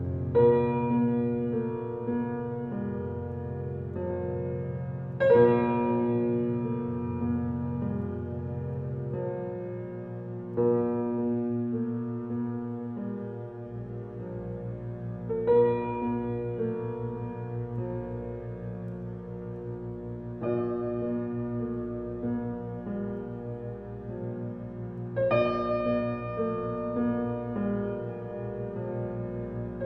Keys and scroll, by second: 11.1 g, 15.5 shift+d, 22.0 s, 27.7 s.